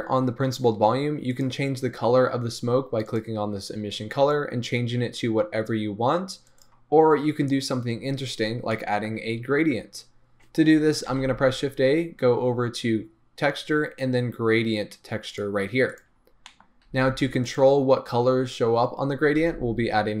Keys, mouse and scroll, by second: 3.2 click.